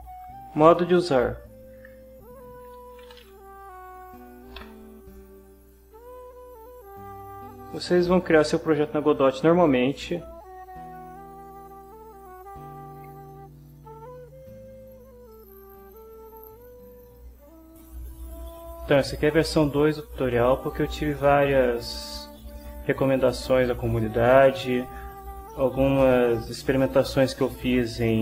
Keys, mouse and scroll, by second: 2.6-3.5 typing, 3.8 Down, 4.6 Return, 7.5 click, 15.3 click.